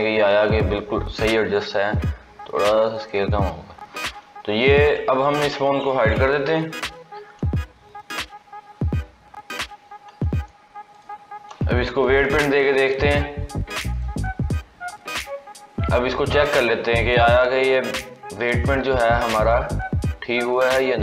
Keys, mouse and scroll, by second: 1.5 s, 3.3-4.0 scroll down 12, 4.0 scroll up 2, 5.1 click, 6.4 h, 9.3 a, 10.8 shift+click, 12.2 ctrl+p, 15.5 scroll down 2, 16.3 click, 19.3-21.0 drag.